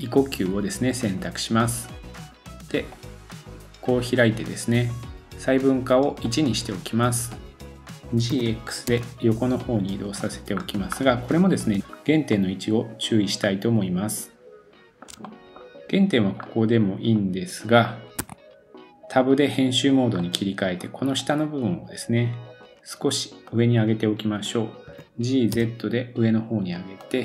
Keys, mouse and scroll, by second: 5.9 middle click, 7.8-10.6 middle drag, 7.8 g, 10.5-11.1 scroll up 2, 11.1-21.2 middle drag, 11.8 scroll up 1, 11.9-12.5 scroll down 2, 13.7-14.3 scroll up 1, 14.3-14.7 scroll down 1, 14.7 shift+scroll up 1, 18.2 Tab, 20.8-21.2 scroll up 1, 21.2-22.6 drag, 22.6-23.7 middle drag, 23.7-27.1 drag, 24.9 g.